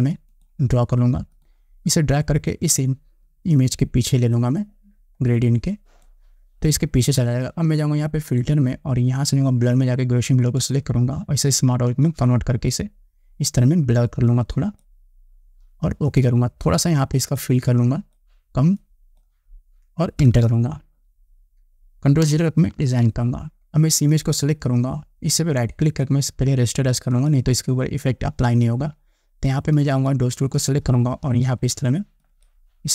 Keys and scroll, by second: 20.4 Return, 22.9 ctrl+0.